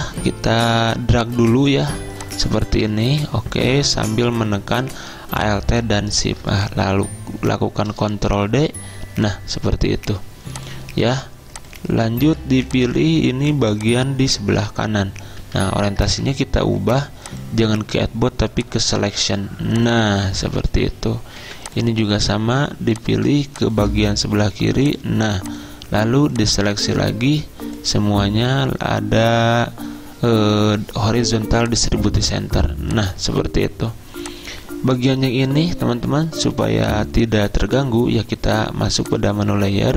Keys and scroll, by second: 8.2 ctrl+d, 9.2 ctrl+d, 15.5 z, 16.1 ctrl+z, 21.5 v.